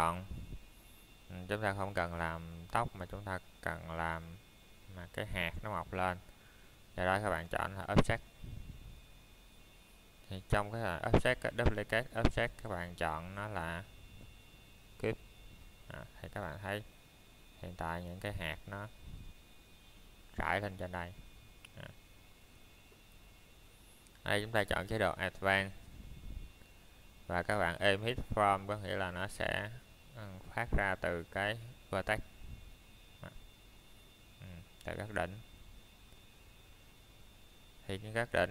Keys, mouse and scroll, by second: 0.8 click, 3.6 middle click, 6.5 Tab, 7.7 click, 8.3 middle click, 9.1 scroll up 1, 23.6 click, 29.3 click, 33.1 middle click, 33.6 scroll up 1, 35.1 middle click.